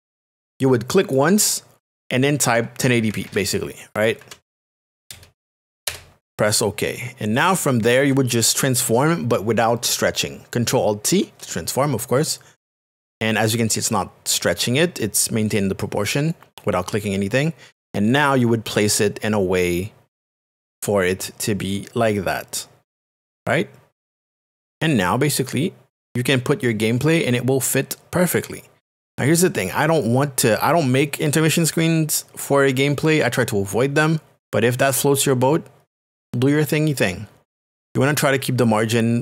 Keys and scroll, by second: 1.0 z, 3.0 KP_1, 4.2 KP_0, 4.7 KP_1, 5.9 Return, 12.4 alt+t.